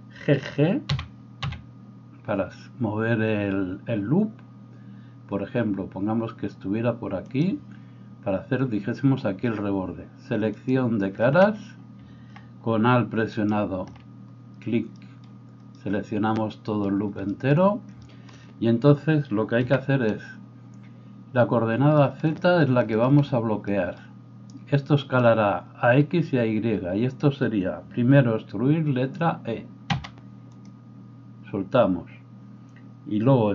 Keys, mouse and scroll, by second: 0.9 g, 10.7-30.7 drag, 13.4 alt+right click, 19.7 n, 29.9 e, 30.7-33.5 middle drag.